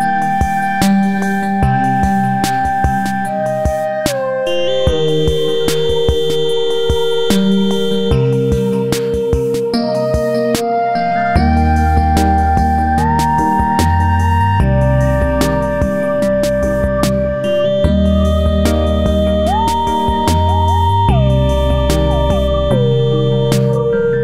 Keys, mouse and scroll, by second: 0.5 click, 1.4-3.0 drag, 3.0 Down, 4.7 click, 5.6 Right, 6.0 Up, 7.2 click, 10.5 click, 11.2 ctrl+g, 11.5 click, 12.3 Right, 12.5 Up, 14.3 click, 15.5 F4, 16.4-17.7 drag, 17.7 F4, 19.5 click, 20.2 Down, 20.5 Right, 20.7 Down, 21.0 click, 23.0 click, 23.6 click, 24.1 Right.